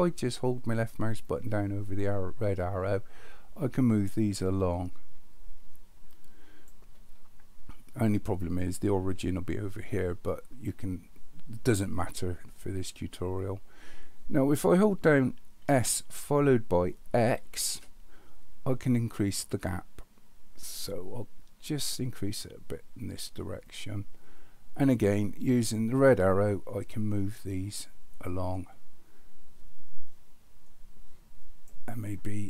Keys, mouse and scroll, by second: 1.3-6.7 drag, 15.6 s, 25.9-31.6 drag.